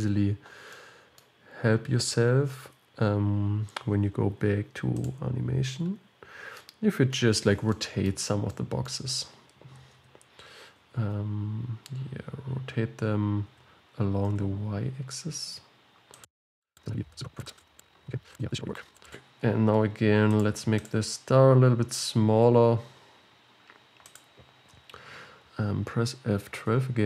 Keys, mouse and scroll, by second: 0.7-2.5 middle drag, 2.5-5.2 scroll down 17, 5.2 click, 6.8-8.3 middle drag, 8.3 scroll down 4, 8.6-10.0 middle drag, 10.0 r, 13.7 r, 16.7 r, 17.2 click, 17.7 r, 18.1 click, 18.4 r, 18.7 click, 19.0 r, 19.6 scroll up 4, 20.4 click, 21.0-22.6 drag, 22.6 s.